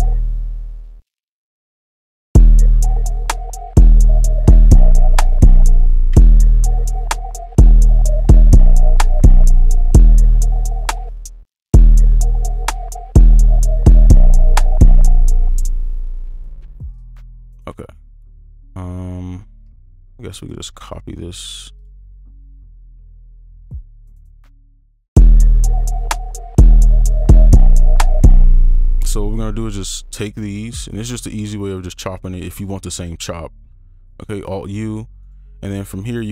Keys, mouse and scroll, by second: 0.1 space, 1.4 ctrl+click, 6.1 space, 10.9 space, 15.3 space, 16.2 space, 20.0 ctrl+click, 24.7 shift+right click, 28.3 space, 28.7 ctrl+click, 33.0 alt+u, 35.2 right click, 36.1 ctrl+click.